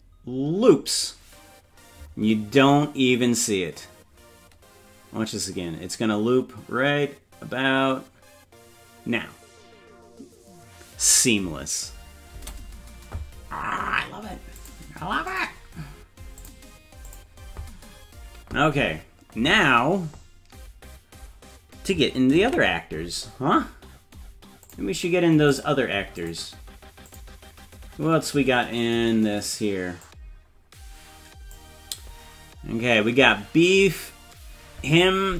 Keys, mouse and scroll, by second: 2.6 scroll up 2, 12.3 space, 14.6 click, 15.3 click, 16.4 click, 17.1 click, 22.6 ctrl+s, 23.5-24.7 scroll up 3, 24.7 click, 24.7 scroll up 2, 25.5 click, 26.2 click, 27.1 click, 28.1-28.6 scroll up 2, 30.1-31.6 drag.